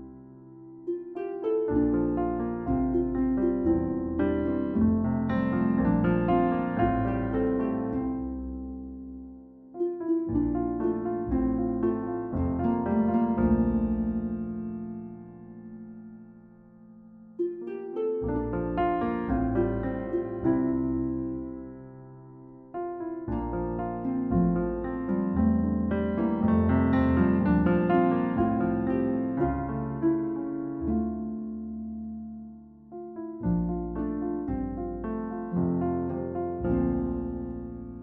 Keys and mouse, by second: 1.6 click, 2.1-4.0 drag, 4.7-7.4 drag, 8.7-9.8 drag, 10.2 click, 11.0 f, 11.2 f, 11.4 f, 12.2 click, 13.3 click, 14.4 click, 19.4 click, 19.7 click, 28.2 click, 29.7 click, 30.2 click, 30.7 click, 31.7 click, 33.9 click, 34.8-36.2 drag, 36.6 click, 37.1 click.